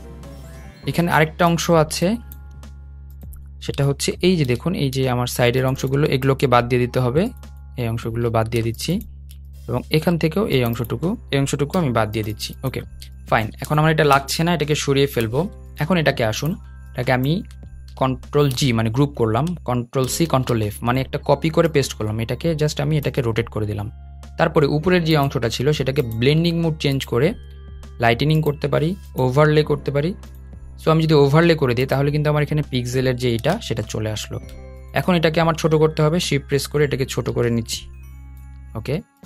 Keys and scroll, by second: 7.5 BackSpace, 18.2 super+g, 19.7 super+c, 20.0 super+f.